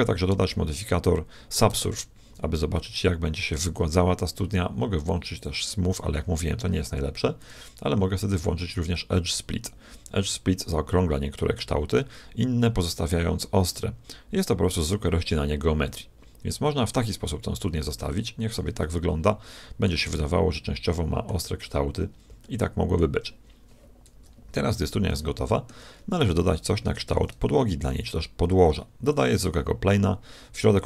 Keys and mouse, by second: 1.7 ctrl+1, 2.7-5.4 middle drag, 5.4-7.3 drag, 7.5-9.1 drag, 10.6-15.7 middle drag, 15.9-22.1 middle drag, 22.4-24.3 middle drag, 24.1 KP_1, 25.1-26.7 middle drag, 27.1 shift+a.